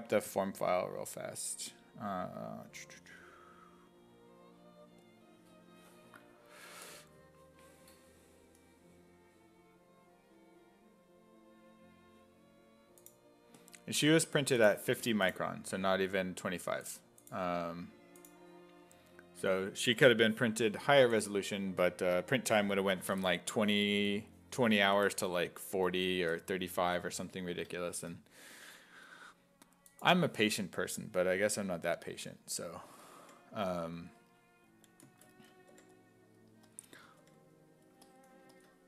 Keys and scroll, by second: 27.5 alt+Tab, 32.2 s, 32.9 s, 33.2 5, 35.7 5, 37.0 s, 37.2 5.